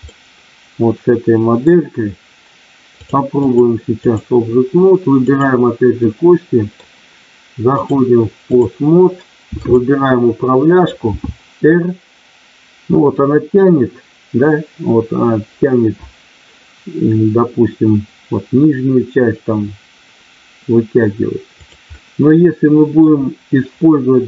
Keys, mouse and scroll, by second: 3.4 click, 5.4 click, 6.0 middle click, 7.7 click, 9.5 click, 11.1 r, 21.8-23.0 middle drag.